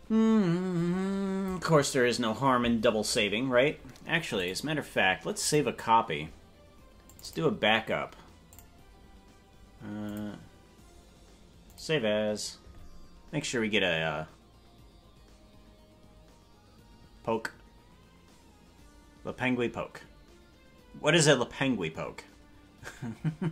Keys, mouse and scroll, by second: 4.3-5.6 drag.